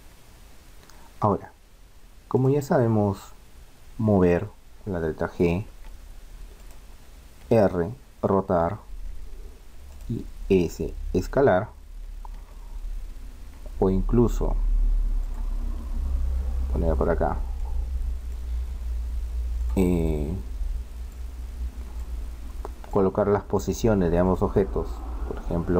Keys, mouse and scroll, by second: 0.6-2.4 middle drag, 2.4-4.4 right drag, 4.1 g, 6.6-8.6 right drag, 7.4 r, 10.0-11.6 right drag, 10.7 s, 15.2-17.1 drag, 15.8 KP_1, 17.1 click, 17.6-19.6 middle drag, 19.6-24.8 drag.